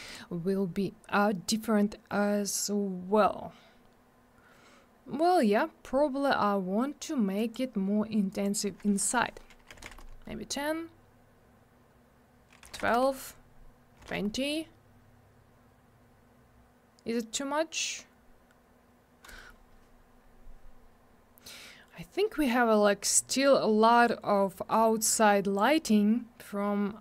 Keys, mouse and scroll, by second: 0.1 click, 0.1 click, 3.2-4.0 scroll up 1, 4.9-5.9 scroll down 1, 7.4 click, 7.5 click, 8.3 click, 8.4 click, 9.7 1, 9.8 Return, 12.8 Return, 14.0 2, 14.1 Return, 20.2 scroll down 1, 25.0 click.